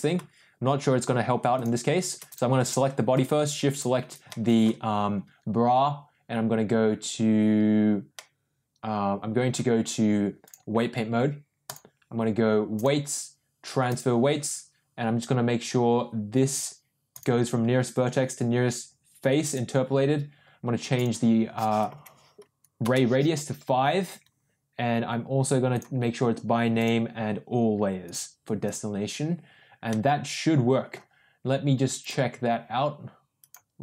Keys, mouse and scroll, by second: 1.5 shift+click, 2.2 click, 2.5 click, 4.2-4.6 middle drag, 8.1-9.4 middle drag, 10.4-11.7 drag, 12.7-14.2 drag, 17.0-20.0 drag, 20.9-23.4 drag, 25.6-27.4 drag, 28.0 click, 29.8-30.9 middle drag, 32.0-33.5 drag.